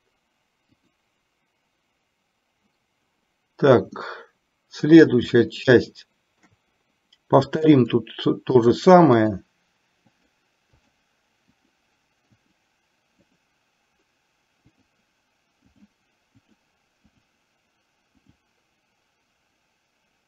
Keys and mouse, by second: 0.0 click, 1.0 click, 4.2-5.4 middle drag, 5.8 shift+middle click, 8.0 click, 8.8 click, 9.4 click, 10.2 click, 11.1 click, 11.8 click, 12.6 click, 13.4 click, 14.9 click, 15.9 click, 16.6 click, 17.3 click, 18.4 click.